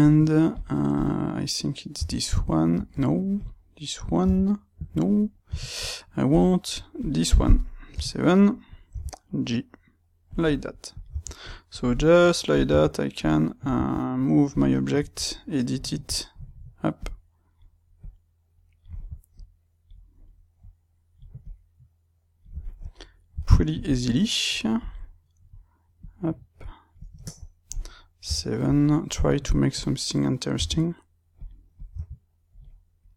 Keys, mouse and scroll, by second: 0.9-2.0 drag, 2.0 g, 2.8 Escape, 3.3 click, 4.2 g, 4.9 Escape, 5.0-6.3 middle drag, 6.3 click, 6.9 click, 7.8 KP_7, 8.9 g, 10.3 click, 10.9 click, 11.1 g, 11.8 click, 12.5 click, 12.7 g, 13.5-14.5 drag, 13.7 g, 14.7-16.9 shift+middle drag, 16.9 click, 17.9 click, 19.3 click, 20.5 click, 21.3-22.5 drag, 22.5-24.7 shift+middle drag, 24.7 click, 25.9 click, 27.1-29.7 shift+middle drag, 28.1 KP_7, 29.7 click, 30.5 g, 31.7 click, 31.9 g, 32.5 click.